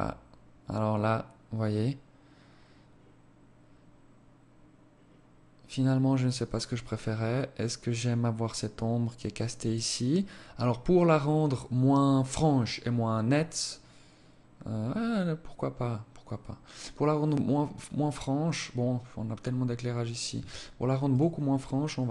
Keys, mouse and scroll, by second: 19.2 Escape, 20.0 right click, 21.6 click, 21.8 click, 21.9 click.